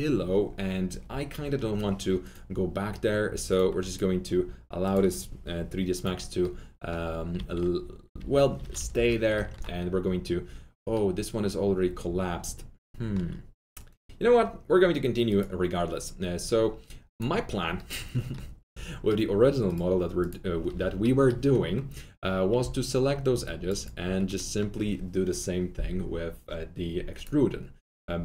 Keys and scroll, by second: 7.3 alt+q, 8.1 alt+q, 8.6 F3, 8.9 F4, 10.8 alt+q, 18.7 F3, 20.6 F3, 22.5 F3.